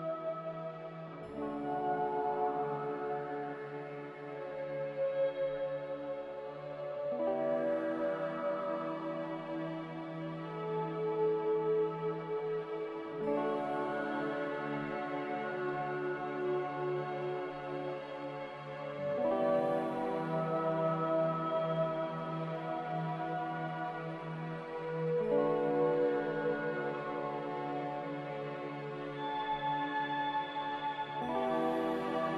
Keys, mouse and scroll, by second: 0.1 b, 3.1-4.5 typing, 12.8-13.6 typing, 13.7 Escape, 14.7 typing, 15.1 Return, 28.3 b, 29.7-30.5 typing.